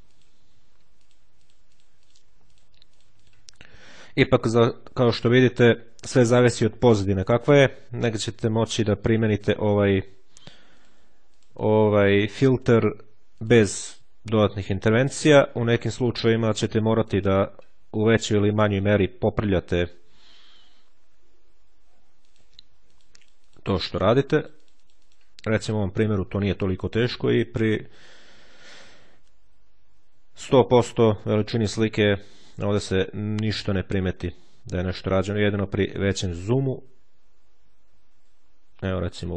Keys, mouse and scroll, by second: 0.9-3.6 drag, 4.2-5.2 ctrl+scroll down 1, 6.6-7.2 ctrl+scroll up 1, 8.4 click, 9.3-10.4 drag, 10.6 ctrl+click, 11.4-12.9 ctrl+drag, 13.2-17.7 drag, 20.2-20.7 ctrl+scroll down 3, 22.2 ctrl+click, 25.4 ctrl+click, 25.6-26.2 ctrl+scroll down 1, 27.6-28.2 shift+scroll down 1, 29.7-30.3 ctrl+scroll down 1, 35.0-36.0 ctrl+scroll up 1, 36.2-36.8 ctrl+scroll up 2, 37.4-37.9 ctrl+scroll down 2, 38.2-38.8 ctrl+scroll down 3, 39.2-39.3 ctrl+scroll up 2.